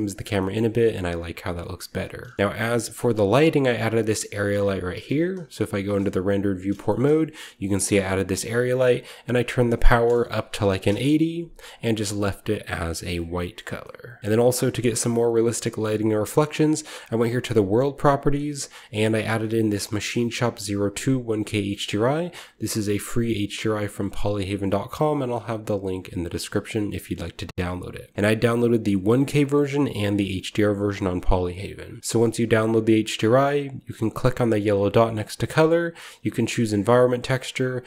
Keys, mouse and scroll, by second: 1.2 shift+middle click, 2.4-3.5 scroll down 1, 3.4 click, 3.6 g, 5.0-5.6 typing, 6.9-7.4 typing, 7.0-10.4 shift+middle drag, 7.9-9.3 shift+drag, 9.4 click, 10.5 typing, 11.9-14.2 drag, 13.7-14.9 middle drag, 14.2-17.0 shift+scroll up 1, 14.7-15.4 typing, 15.5-17.0 shift+middle drag, 17.2-18.3 drag, 18.4-19.5 drag, 19.6-20.7 drag, 19.8 typing, 21.2 click, 21.8 click, 24.3 click, 27.7 click, 28.3 click, 29.3 click, 29.9 click, 30.8 drag, 35.1 click.